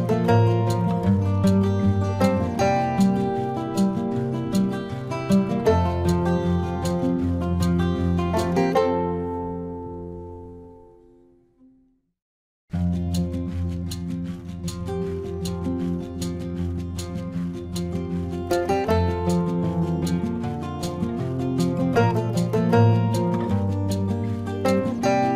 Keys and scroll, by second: 1.7 space, 2.5 space, 4.6-7.8 typing, 8.2 ctrl+alt+z, 8.5 ctrl+alt+z, 8.9 space, 9.3 space, 9.9 space, 11.0 space, 11.4 space, 11.7 space, 12.5 space, 15.3 space, 16.6 space, 17.9 space, 19.5 ctrl+-, 19.9 space, 20.3 ctrl+=, 20.5 space, 20.7 ctrl+=, 20.9 space, 21.8 space, 23.3 space, 23.9 ctrl+=, 25.1 ctrl+-.